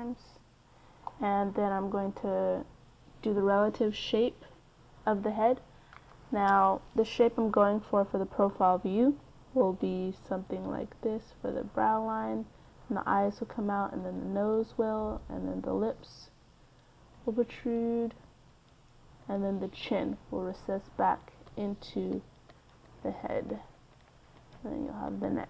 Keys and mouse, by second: 0.7 KP_3, 8.4-25.4 d, 9.4-12.0 drag.